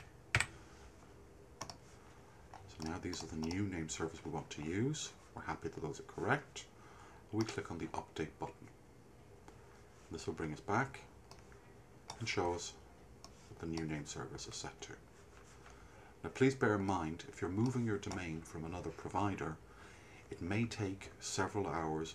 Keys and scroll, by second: 0.0-0.9 typing.